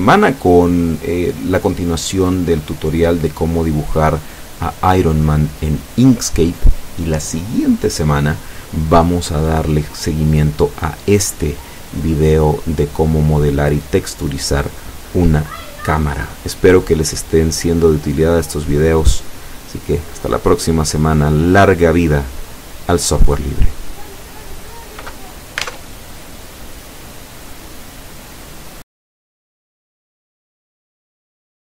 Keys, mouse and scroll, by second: 29.8 click.